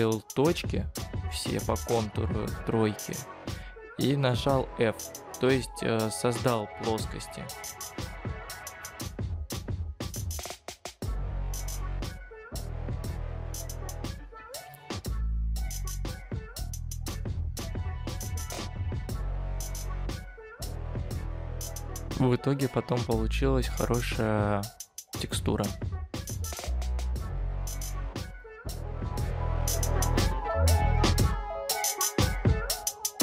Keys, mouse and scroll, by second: 4.1 shift+click, 4.5 shift+click, 21.1-24.4 scroll down 4.